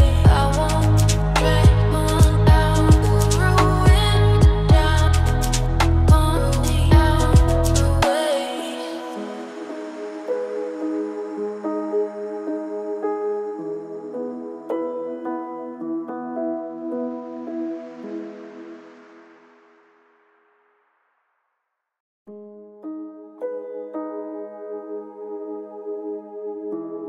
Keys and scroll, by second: 5.7 ctrl+z, 7.2 ctrl+space, 7.5 ctrl+z, 8.4 ctrl+space, 11.2 ctrl+shift+], 12.8 ctrl+space, 20.0 shift+F6, 26.5 shift+F6.